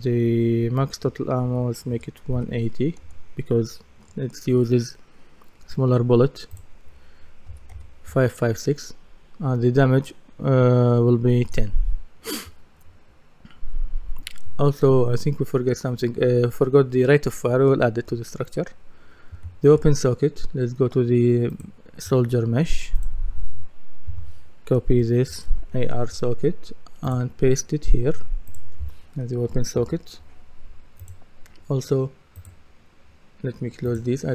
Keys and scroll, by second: 1.4 KP_1, 3.0 Return, 7.5 KP_1, 7.7 KP_0, 11.4 Return, 24.1 F2.